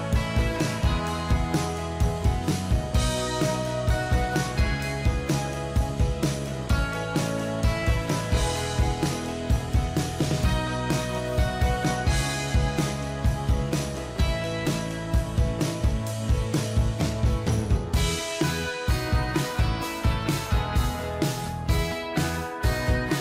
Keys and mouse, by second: 2.7 ctrl+=, 3.0 ctrl+=, 7.8 double click, 16.1 ctrl+j, 19.9 ctrl+j, 20.8 shift+click, 22.4 shift+click.